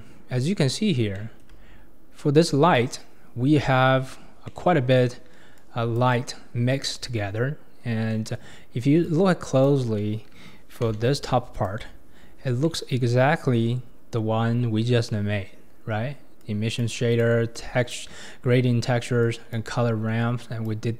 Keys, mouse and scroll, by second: 0.6-1.2 scroll up 4, 1.2-1.8 shift+middle drag, 1.8-2.6 scroll up 4, 3.9-4.5 scroll down 8, 4.5-5.0 middle drag, 5.0-5.6 scroll up 1, 5.6 click, 7.7-8.1 scroll down 2, 8.1-9.0 scroll up 5, 8.1-8.5 middle drag, 9.0-10.9 drag, 10.9 g, 11.9-12.6 scroll up 8, 12.6-15.7 middle drag, 16.4 click, 17.5-19.3 drag, 20.4 click.